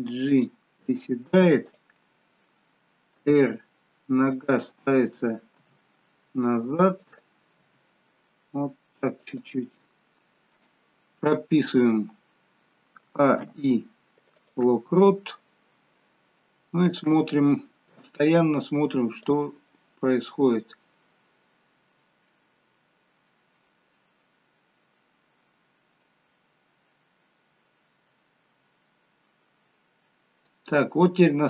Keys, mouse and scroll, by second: 1.7 click, 3.2 r, 5.5 g, 7.8 g, 13.1 a, 13.4 i, 17.0 click, 19.5 click.